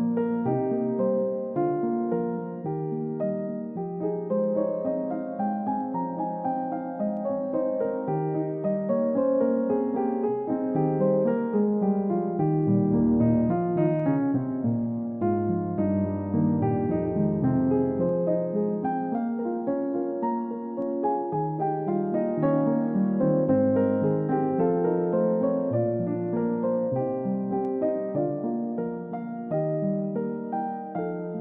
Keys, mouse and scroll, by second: 1.6 typing, 2.4 Return, 4.5 typing, 5.0 Return, 6.2-6.6 scroll up 1, 17.5 scroll down 1, 17.8 middle click, 22.2 double click, 26.2 scroll down 1, 26.9 middle click, 27.1-27.7 scroll down 1, 27.8 double click, 28.1-28.4 scroll up 1, 29.4-30.8 scroll down 1, 30.8 scroll up 1.